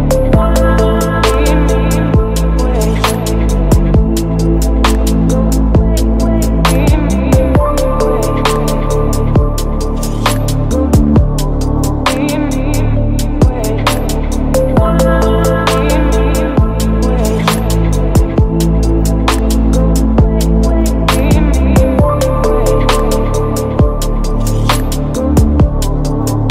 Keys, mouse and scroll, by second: 0.0-0.2 typing, 3.9-6.2 drag, 7.6-9.0 drag, 9.0-10.6 typing, 12.0 g, 12.1 r, 12.2 e, 12.3 s, 13.1-17.3 drag, 17.5-18.0 typing, 19.1 Right, 19.6 shift+/, 19.9 Return, 21.4-23.5 typing, 24.3 Down, 24.4 Return, 25.9 click.